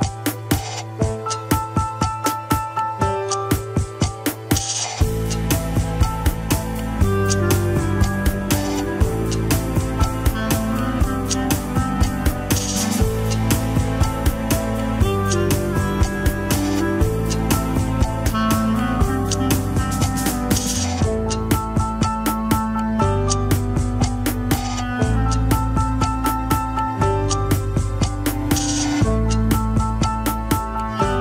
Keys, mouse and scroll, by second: 1.9 alt+z, 2.1 s, 3.2 scroll down 1, 3.3 KP_7, 3.6 scroll up 2, 3.9 shift+middle click, 4.3 r, 4.8 alt+z, 5.1 shift+middle click, 5.7 s, 8.5 click, 8.9 s, 9.6 click, 9.8 s, 11.1 click, 11.5 shift+click, 11.7 shift+click, 12.0-12.5 scroll down 2, 12.5 shift+n, 13.7 ctrl+r, 14.7 shift+n, 15.2 scroll down 3, 15.5 shift+middle click, 16.0 ctrl+s, 16.8 click, 17.1 shift+click, 17.4 shift+click, 17.8 shift+click, 18.0 KP_1, 18.3-19.8 scroll up 3, 19.8 click, 20.0-22.2 drag, 22.8 scroll down 4, 23.1 ctrl+Tab, 23.8 shift+middle drag, 24.4 ctrl+s, 24.6-24.9 middle drag, 24.9 KP_3, 25.1 scroll up 3, 25.3 alt+z, 25.6 shift+middle click, 25.8-26.1 scroll up 2, 26.1 Tab, 26.2 alt+z, 26.7 click, 27.0 scroll up 2, 27.5 s, 28.1-29.2 scroll down 11, 29.2 ctrl+s, 29.7 shift+middle click, 29.9-30.5 scroll up 1, 30.6 ctrl+Tab, 31.1 alt+z.